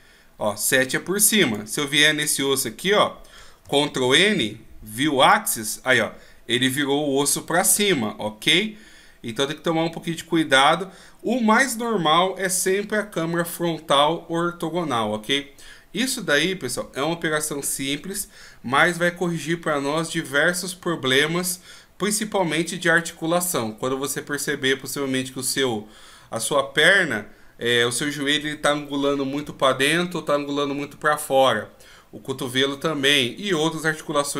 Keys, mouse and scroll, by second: 1.4 right click, 3.6 ctrl+n, 7.8 middle click, 10.8 scroll down 1.